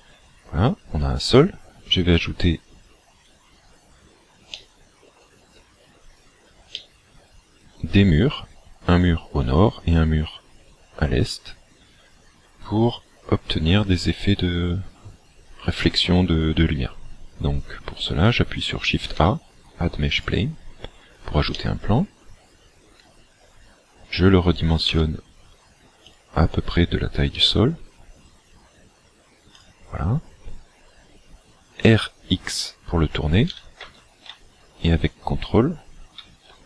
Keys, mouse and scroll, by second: 0.1-1.9 scroll down 3, 4.1-4.5 scroll down 5, 4.6 middle click, 6.2 scroll down 13, 6.8 middle click, 19.1 shift+a, 21.5 middle click, 22.7-23.1 scroll up 4, 23.2-24.3 scroll down 3, 24.9 s, 26.2 click, 27.4 s, 29.7 click, 33.6 r.